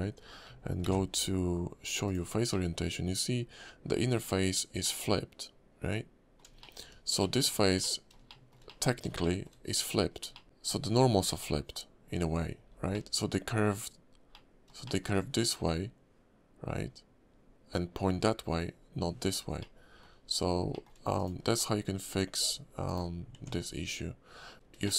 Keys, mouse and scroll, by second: 0.8 alt+v, 2.5 middle click, 4.8 middle click, 6.6 shift+middle click, 6.9 scroll up 2, 7.2 middle click, 7.8 middle click, 7.9 shift+middle click, 8.3 shift+middle click, 8.6 middle click, 9.2 shift+middle click, 10.3 shift+middle click, 10.7-11.8 scroll down 3, 12.6 scroll down 2, 12.9 middle click, 13.4 scroll down 1, 14.3 middle click, 14.8 shift+middle click, 19.6 middle click, 20.2-20.6 scroll up 4, 20.7 shift+middle click, 21.1 click, 23.3 Tab, 23.7 scroll down 3, 24.5 Tab, 24.5 scroll down 2, 24.5 y, 24.8 shift+middle click.